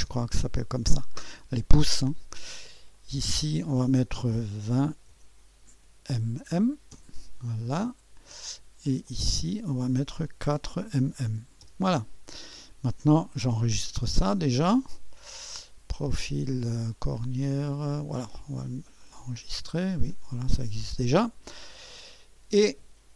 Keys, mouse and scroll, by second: 0.0 Return, 2.8-4.0 drag, 4.5-6.5 typing, 6.9 Return, 8.8-10.1 drag, 10.2-10.9 typing, 11.6 Return, 13.9 ctrl+s, 18.1 click, 19.0 click, 20.1 click, 21.7 click.